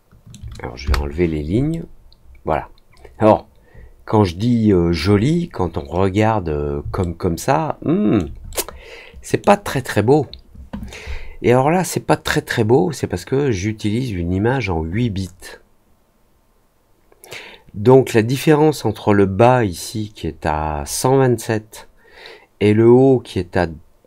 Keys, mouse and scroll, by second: 1.6-4.9 alt+middle drag, 5.8-6.7 scroll up 2, 6.9-8.1 alt+middle drag, 8.4 middle click.